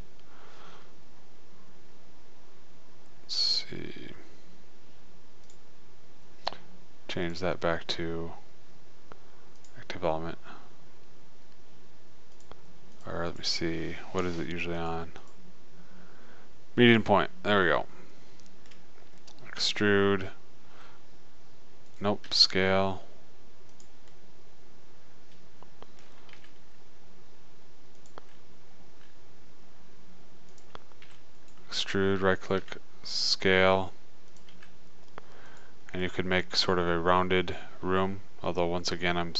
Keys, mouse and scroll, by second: 2.0-4.4 middle drag, 5.9-8.0 drag, 12.8-14.4 drag, 15.2-17.2 drag, 18.2-21.3 middle drag, 20.1 e, 22.7 s, 26.8 g, 29.3 s, 31.5 e, 33.0 s, 34.9 g, 36.4 middle click.